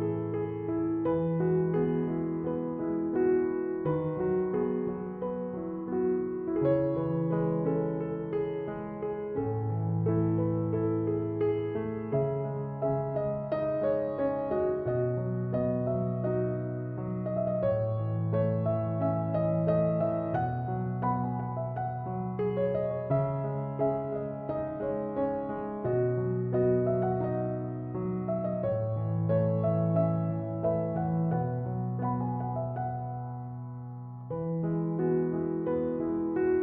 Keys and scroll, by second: 6.2 typing, 13.2 typing, 35.6-36.4 typing.